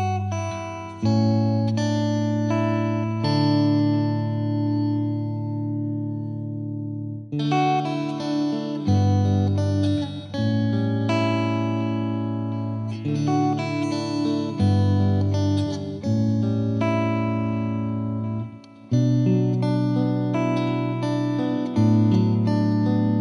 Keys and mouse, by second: 1.3-2.4 drag, 5.8 click, 9.1 click, 13.2 5, 13.7 5, 14.8 Tab, 18.2 click, 19.2 click, 20.8 click, 21.3 click.